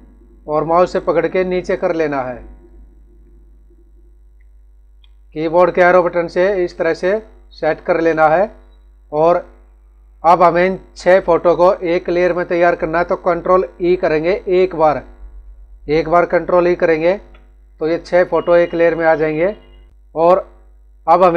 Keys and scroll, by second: 2.9 Up, 5.0 Down, 5.8 Up, 7.0 Down, 8.0 Up, 16.9 ctrl+e, 19.9 Up.